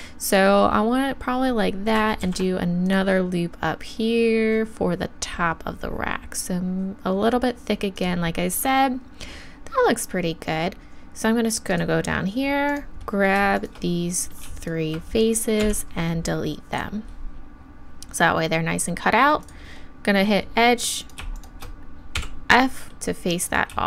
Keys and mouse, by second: 0.3-2.2 drag, 2.2 ctrl+r, 8.0-16.5 right drag, 12.7-14.0 drag, 15.6 x, 19.4-21.0 drag, 23.5-23.8 right drag.